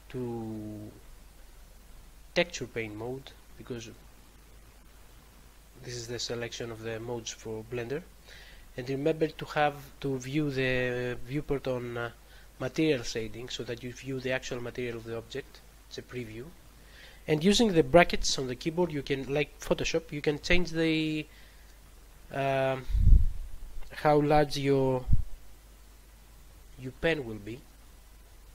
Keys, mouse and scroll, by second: 1.0 click, 1.3 click, 1.9 double click, 2.6 double click, 3.3 click, 8.5 click, 16.2 click, 18.7 [, 18.9 [, 20.4 [, 20.6 [, 21.7-22.0 typing, 26.3-28.1 typing.